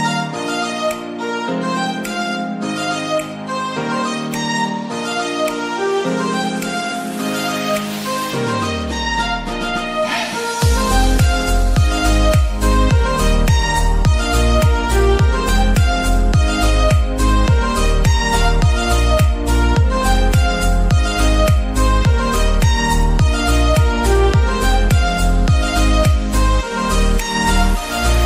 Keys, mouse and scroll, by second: 0.1 e, 0.4 shift+z, 2.2 click, 2.5-4.0 middle drag, 4.0 Tab, 4.4 ctrl+3, 5.0-6.7 right drag, 5.4 click, 6.7 click, 7.3 Tab, 7.6-8.7 scroll up 4, 8.0 ctrl+r, 8.7-9.1 scroll down 1, 9.1 click, 10.5 click, 10.8 scroll down 1, 11.0-12.0 middle drag, 12.0 ctrl+r, 14.2 ctrl+r, 14.4 ctrl+r, 15.1 click, 15.4 middle click, 15.8 ctrl+r, 16.2 ctrl+click, 16.7 right click, 16.9 scroll down 3, 17.2-18.6 middle drag, 18.6-19.3 scroll down 7, 19.3-19.8 middle drag, 19.8-20.3 scroll down 6, 20.3-21.8 middle drag, 21.7-22.3 scroll up 2, 22.3 middle click, 23.1 Tab, 24.6 t, 25.3-25.6 scroll up 1, 25.6 middle click, 26.1 shift+a, 27.5 click.